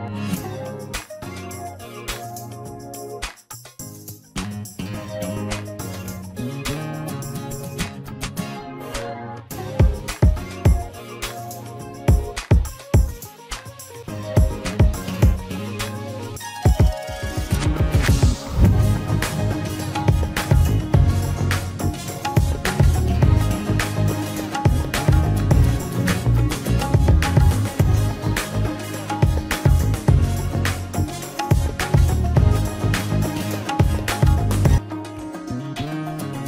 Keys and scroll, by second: 21.4 Delete, 21.7 Delete, 30.4 ctrl+space.